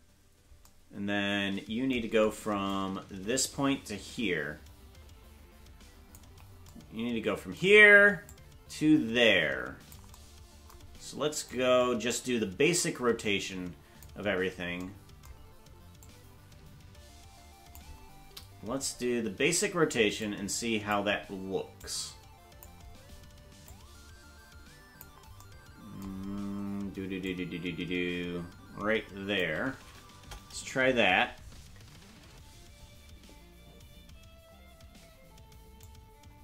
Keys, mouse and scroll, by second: 0.2 right click, 2.7 click, 8.3-10.0 drag, 11.5-14.1 drag, 16.0-17.8 drag, 20.2 click, 21.8 click, 23.7-25.0 drag, 27.3-29.4 shift+drag, 30.1 KP_0, 35.8-36.4 drag.